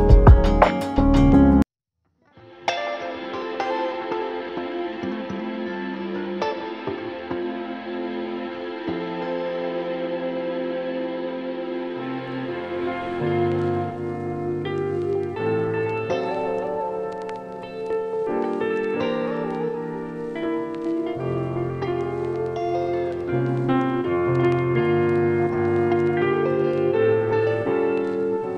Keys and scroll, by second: 12.7 space, 15.0 space, 20.2 space, 22.7 space, 24.2 space.